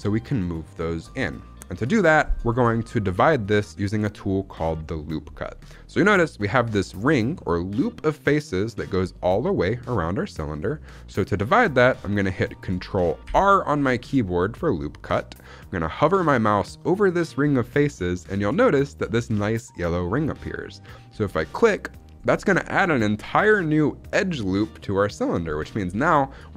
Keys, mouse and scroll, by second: 3.4 middle click, 5.9-7.0 middle drag, 7.3-8.8 middle drag, 10.5 middle click, 13.1 ctrl+r.